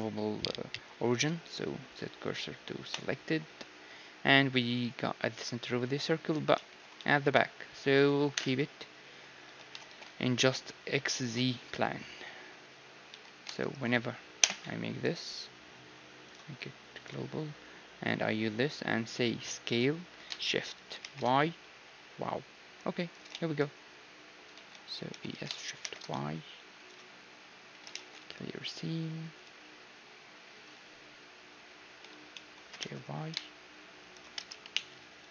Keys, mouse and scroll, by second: 3.7 z, 6.5-9.2 middle drag, 7.0 z, 8.4 KP_1, 8.7 z, 9.5 z, 9.8 ctrl+space, 11.9 z, 13.2 z, 13.6-16.3 right drag, 14.4 ., 16.3-18.2 drag, 19.6 s, 23.3 z, 24.5 z, 25.1 e, 26.9 z, 27.9 ctrl+e, 30.9 z, 31.2 z, 32.1 z, 32.4-34.7 middle drag, 32.6 g, 34.7 KP_3.